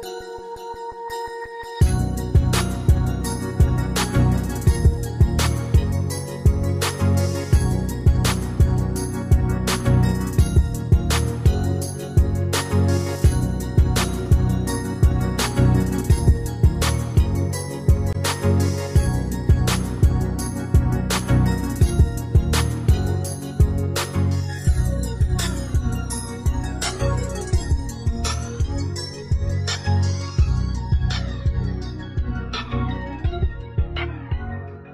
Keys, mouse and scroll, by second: 4.1 shift+click, 10.1 ctrl+g, 17.9 ctrl+g.